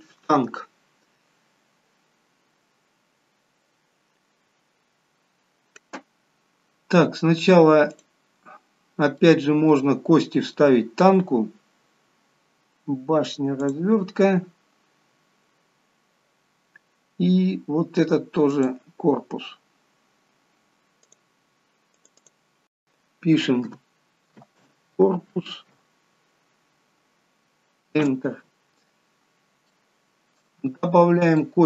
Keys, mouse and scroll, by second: 5.7-6.5 scroll up 1, 6.5-7.0 scroll up 4, 7.0-8.2 scroll down 3, 8.2 click, 8.9 scroll down 2, 9.4 middle click, 15.3 click, 15.4-15.9 scroll down 2, 16.0-16.9 scroll down 2, 20.7 click, 21.3 click, 29.1-29.6 scroll down 3, 29.7 shift+middle click, 30.9 middle click.